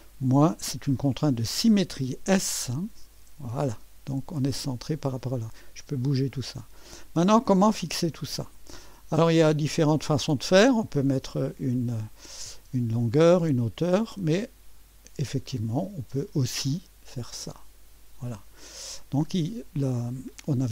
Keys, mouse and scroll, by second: 3.1 s, 4.8-9.1 drag, 9.5 middle click, 10.0-11.6 right drag, 15.2 click, 17.6 click.